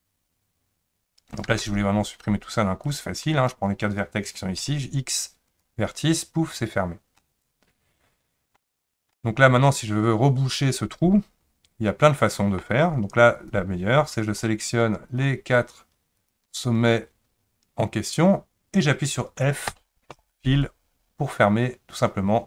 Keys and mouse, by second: 1.5 1, 2.9 click, 4.6 x, 7.2-8.6 middle drag, 9.1-12.6 middle drag, 13.3 click, 15.1 shift+click, 16.2 shift+click, 19.7 f.